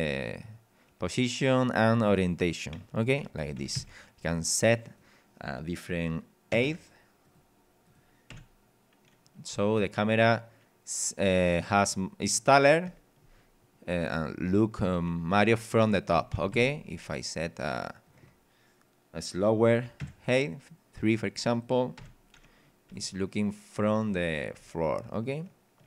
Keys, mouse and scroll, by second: 2.7 w, 3.3 d, 3.7 Escape, 4.9 click, 6.5 KP_1, 6.7 KP_0, 7.3 click, 7.9 click, 8.3 p, 9.5 w, 12.9 d, 16.1 d, 16.5 Escape, 18.1 click, 20.0 KP_3, 20.9 click, 21.6 click, 22.0 p, 22.9 w, 24.7 d.